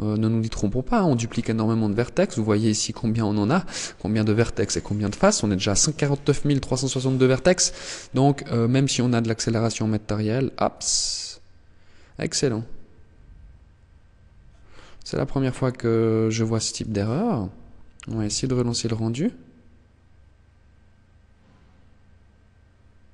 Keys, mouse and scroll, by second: 14.5 click, 17.1 click.